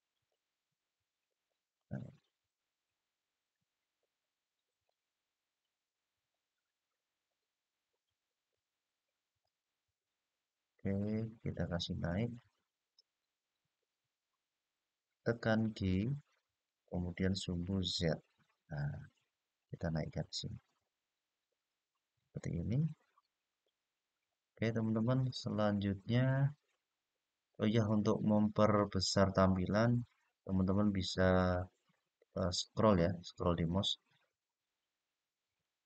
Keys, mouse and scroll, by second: 1.0 click, 1.9 click, 4.6-8.2 middle drag, 9.1 click, 11.2-12.9 middle drag, 16.1-18.0 g, 18.6-21.8 z, 22.3 click, 23.3-25.0 middle drag, 25.4-25.9 scroll up 2, 26.6-26.9 scroll down 1, 31.3-32.5 scroll down 1, 32.5-33.4 scroll up 1, 33.4-33.9 scroll down 1, 34.1-34.9 scroll up 1, 35.3-35.8 middle drag.